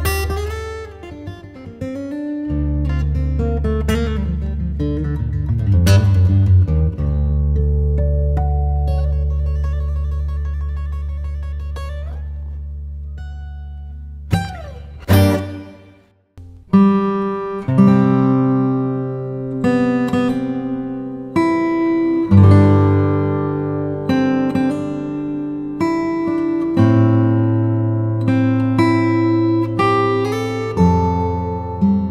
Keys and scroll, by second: 22.1 super+i, 23.6 b, 28.9 x, 29.9 3, 30.9 ], 31.3 [.